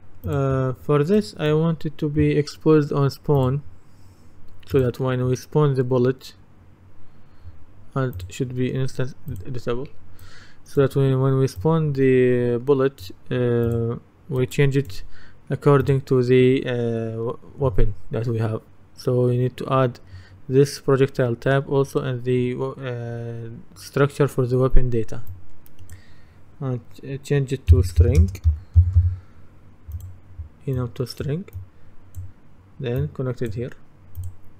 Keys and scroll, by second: 27.8-29.5 typing.